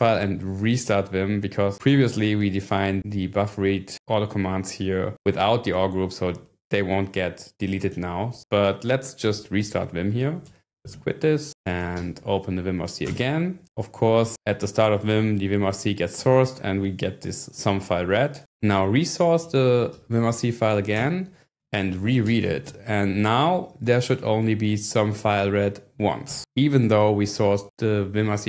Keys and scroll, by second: 9.5-11.3 typing, 12.0 Up, 13.1 Return, 19.1-20.5 typing, 21.0 Return, 21.6-23.1 typing, 26.3 Return.